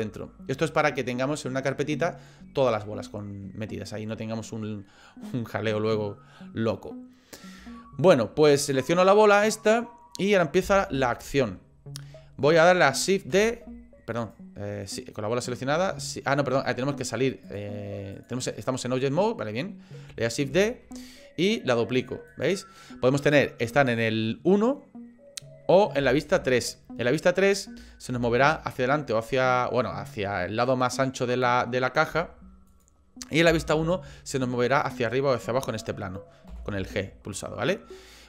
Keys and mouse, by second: 6.9 middle click, 7.8 shift+click, 9.0 click, 10.6 KP_1, 13.3 shift+s, 14.8 click, 17.5 click, 20.5 shift+d, 26.0 KP_3, 28.2 g, 33.5 KP_1, 36.5 g.